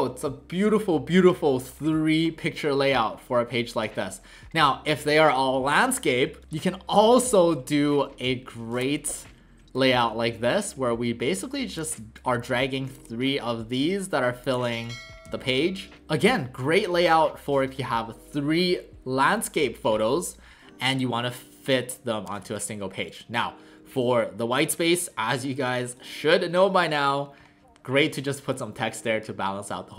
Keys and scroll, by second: 6.1 w, 15.3-15.9 typing.